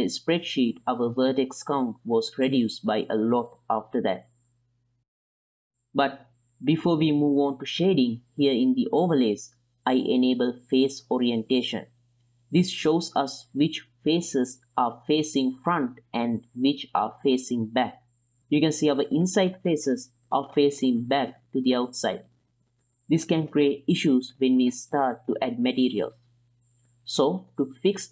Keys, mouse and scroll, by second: 0.2 m, 1.7-2.5 drag, 3.8 m, 5.2-5.8 middle drag, 6.2-6.9 ctrl+middle drag, 7.0 shift+middle drag, 7.4 ctrl+middle drag, 7.7-8.9 middle drag, 9.4-13.2 drag, 14.0-15.1 middle drag, 16.5-16.9 ctrl+drag, 19.0 middle drag, 19.6-20.3 middle drag, 20.6 shift+drag, 21.1 ctrl+drag, 21.5 drag, 21.8 shift+drag, 22.1 ctrl+drag, 22.5 click, 24.2 middle drag, 25.5-26.1 drag, 26.3 ctrl+middle click, 28.0-28.1 drag.